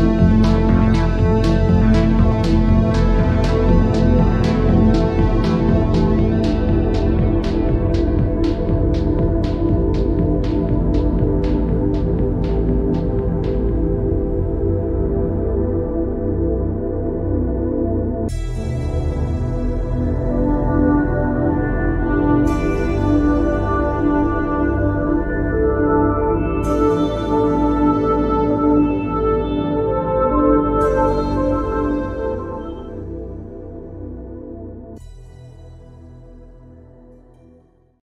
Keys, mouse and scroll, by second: 0.7 click, 1.5 click, 3.8 click, 4.7 click, 5.5 click, 6.7 click.